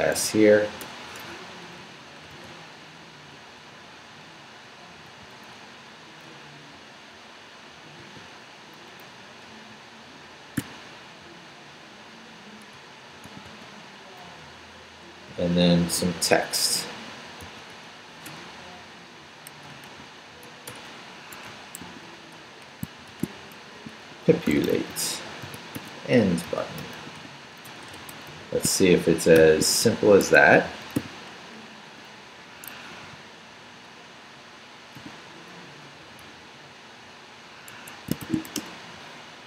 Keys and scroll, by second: 0.8 BackSpace, 1.2 Escape, 1.8 Right, 2.3 v, 2.5 Right, 5.2 Right, 8.0 y, 9.0 Up, 9.7 Left, 10.6 p, 12.5 Right, 13.2 i, 13.4 space, 14.3 Down, 14.8 Up, 15.3 Down, 17.4 shift+d, 18.3 shift+BackSpace, 18.8 BackSpace, 19.0 Up, 19.6 shift+Up, 19.9 shift+a, 20.7 shift+BackSpace, 21.3 Escape, 21.8 shift+a, 23.1-29.4 typing, 30.2 shift+Escape, 31.0 o, 32.7 Escape, 33.0 u, 35.0 o, 35.7 Down, 36.0 d, 37.7 Escape, 38.2 shift+;, 38.5 shift+w, 38.5 Return.